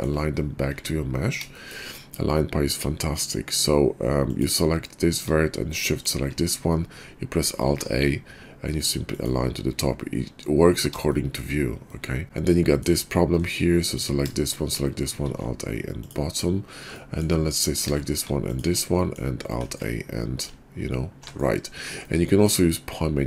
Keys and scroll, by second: 0.7 `, 7.6 alt+a, 15.2 alt+a, 19.5 alt+a, 20.5 alt+a.